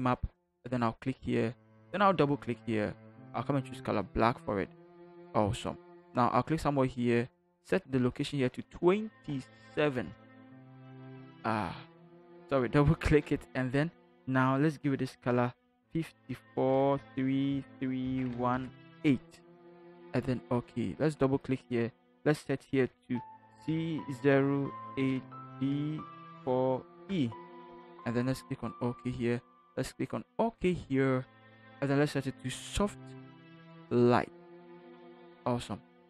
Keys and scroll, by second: 9.2 2, 10.0 Return, 15.9 5, 17.0-18.5 typing, 23.7 c, 24.8 8, 25.5 d, 26.2 4, 27.0 e.